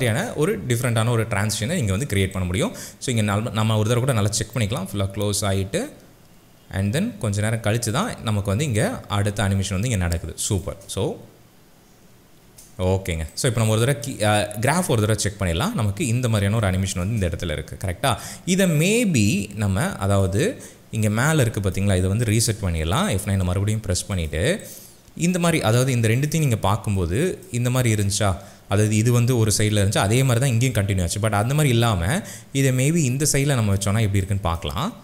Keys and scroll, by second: 10.7 space, 17.0 space, 22.8 F9.